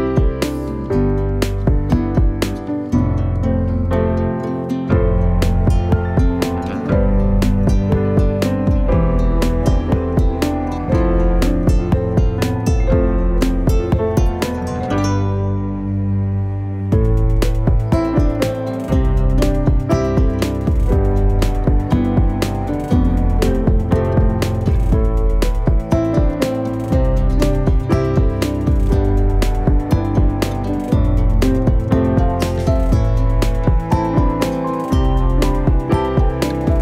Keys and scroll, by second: 1.8-2.5 typing, 3.6-5.5 typing, 6.9-9.0 typing, 18.2 3, 18.4 Return, 19.4 ctrl+z, 21.0 3, 21.9 Return, 23.3 F10, 24.3 3, 24.6 Return, 27.4 F10, 34.9-36.4 typing, 36.7 Return.